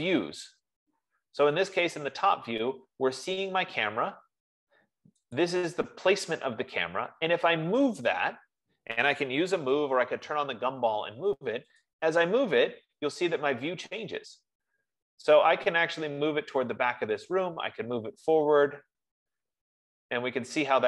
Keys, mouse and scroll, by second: 2.3-2.9 scroll, 3.2-3.8 scroll, 4.3-4.9 scroll, 5.8 click, 9.6-10.5 typing, 12.3 click, 16.5 click.